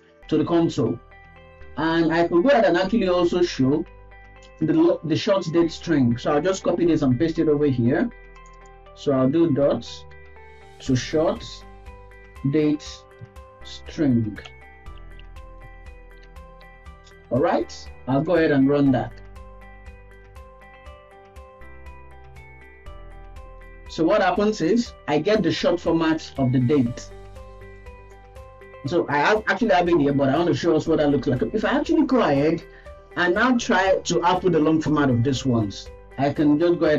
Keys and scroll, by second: 6.8 ctrl+v, 14.7 BackSpace, 16.6 ctrl+s.